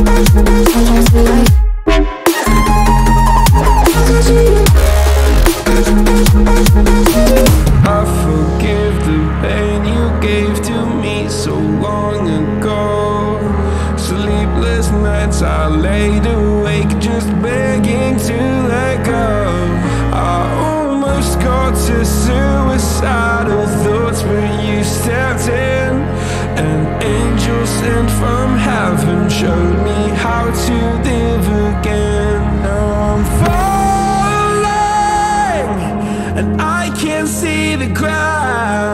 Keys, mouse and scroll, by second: 7.6-17.4 drag, 25.5-29.7 drag, 31.0-36.0 drag, 37.8 click, 38.6 click.